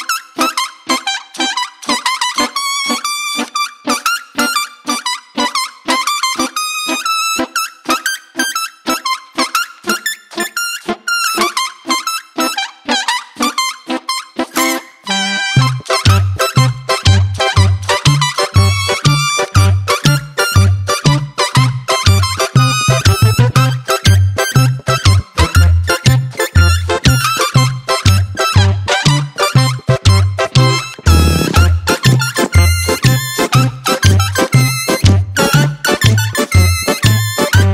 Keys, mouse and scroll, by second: 0.7-2.5 drag, 3.0 Tab, 3.5 Tab, 5.2 click, 6.7 shift+click, 7.6 shift+click, 9.9-12.3 drag, 12.4 click, 13.6 shift+click, 14.0 shift+click, 14.5 shift+click, 14.9 shift+click, 16.7 ctrl+j, 23.3 Tab, 24.8 click, 26.3 click, 27.0 click, 28.1 Tab, 29.3 ctrl+z, 29.8 ctrl+z, 30.4 ctrl+z, 30.7 ctrl+z, 31.1 ctrl+z, 31.5 ctrl+z, 32.0 ctrl+z, 32.5 ctrl+z, 33.1 ctrl+z.